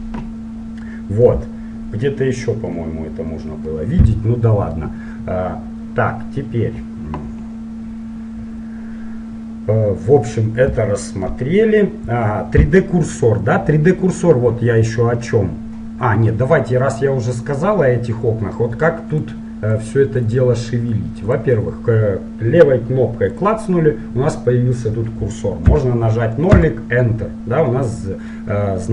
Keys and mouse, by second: 1.0-2.7 middle drag, 3.9-15.3 middle drag, 19.2-22.2 drag, 23.3-25.2 drag, 28.1-28.9 middle drag.